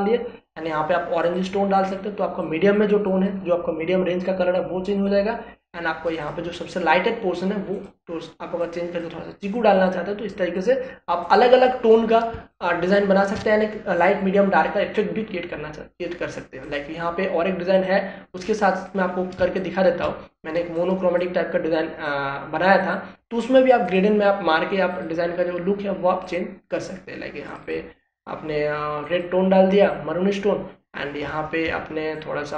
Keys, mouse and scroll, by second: 13.3 ctrl+space, 13.5 ctrl+click, 13.8 ctrl+space, 17.6 click, 20.4 ctrl+space, 20.5 ctrl+click, 20.9 ctrl+space, 21.7-23.8 drag.